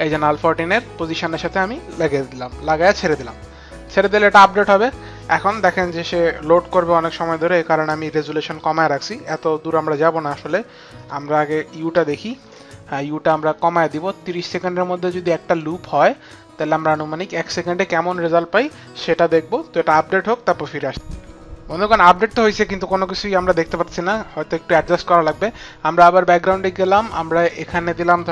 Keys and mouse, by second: 2.2 click, 9.5 click, 10.1 click, 10.6 click, 11.6 u, 13.0 click, 15.8 click, 23.9 click.